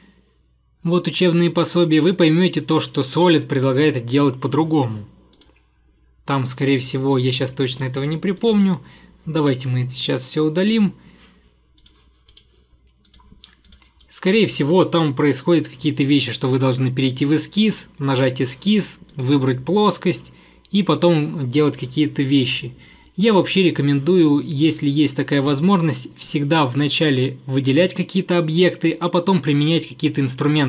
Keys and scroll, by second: 9.5 Delete, 12.4 Delete.